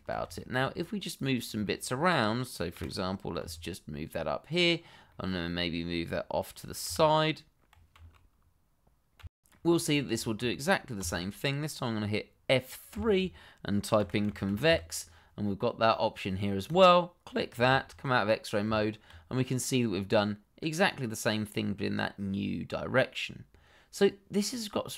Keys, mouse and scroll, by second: 0.3 shift+middle click, 0.4 middle click, 1.1 click, 1.7 middle click, 1.8 shift+middle click, 2.7 g, 3.4 z, 4.5 click, 4.8 scroll down 1, 5.0 middle click, 5.7 t, 6.8 y, 8.1 click, 8.5 middle click, 11.0 a, 12.9 F3, 14.0 c, 14.1 o, 14.5 v, 14.6 e, 16.6 click, 17.3 middle click, 17.6 shift+z, 18.0 middle click, 18.6 Tab, 19.3 scroll down 1, 19.6 middle click.